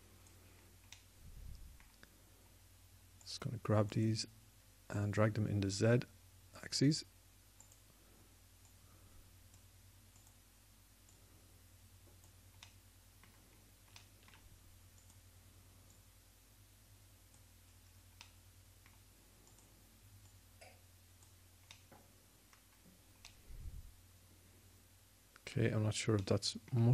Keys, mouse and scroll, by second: 1.4 click, 1.6 click, 13.4-15.8 middle drag, 19.1 middle click, 20.3-22.4 drag, 22.4-23.8 middle drag.